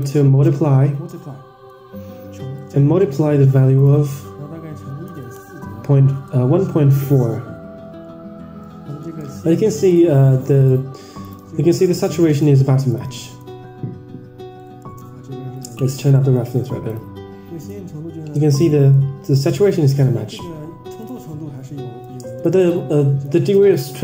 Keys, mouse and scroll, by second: 3.7-8.2 drag, 9.9 ctrl+shift+drag, 10.5 ctrl+shift+click, 11.2 ctrl+shift+click, 11.7 ctrl+shift+click, 12.3 ctrl+shift+click, 12.9 ctrl+shift+click, 13.4 Tab, 14.7 middle click, 15.5 click, 16.1 middle click, 16.8 ctrl+shift+click, 17.7 ctrl+shift+click, 18.9 Tab, 19.4 middle click, 19.9 click, 20.9 click, 21.4 scroll up 1, 22.0 Tab, 22.0-22.4 scroll up 1, 22.5 ctrl+shift+click, 23.4 ctrl+shift+drag.